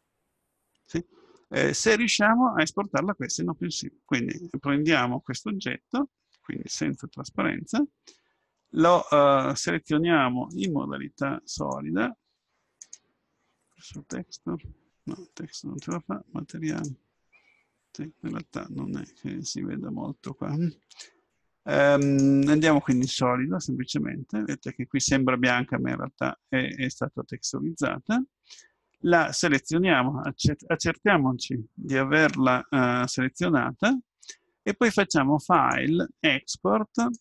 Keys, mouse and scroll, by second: 6.9-8.8 drag, 10.5-12.5 drag, 12.8-14.7 drag, 15.8-17.8 drag, 19.2 Tab, 22.0-24.6 drag, 24.6-26.6 middle drag, 29.4-31.1 right drag, 31.1 click, 35.6-37.2 drag.